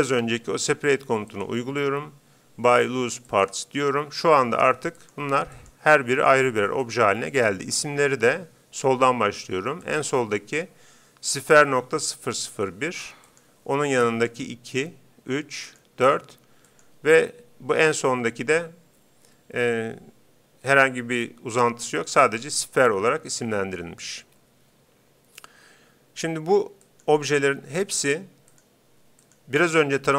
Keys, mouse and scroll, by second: 0.2 space, 5.1-9.1 right drag, 9.8-11.5 right drag, 13.3-18.4 right drag, 26.9-30.1 right drag.